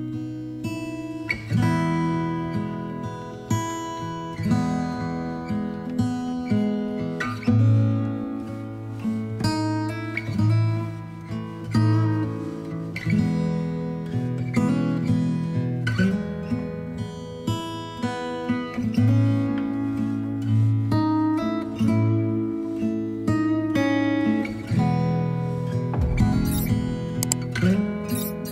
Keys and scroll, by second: 15.8 ctrl+d.